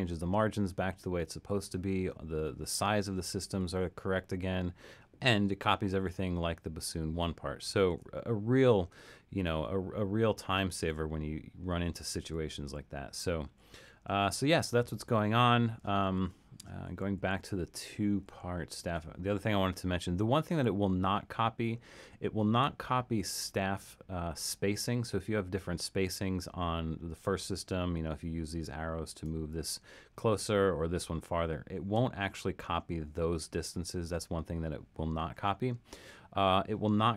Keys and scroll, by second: 3.6 alt+super+,, 7.9 alt+super+., 10.7 alt+super+., 12.2 alt+super+., 12.6 alt+super+., 13.5 alt+super+., 16.1 alt+super+., 16.9 alt+super+., 17.5 alt+super+., 18.3 alt+super+..